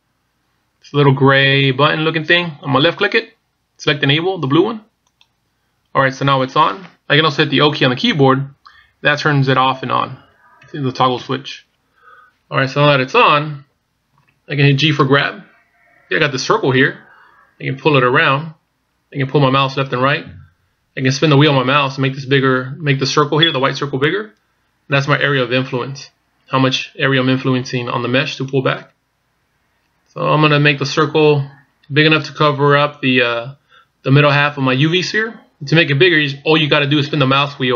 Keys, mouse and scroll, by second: 2.8 click, 8.2 o, 10.0 o, 10.7 o, 11.2 o, 15.1 g.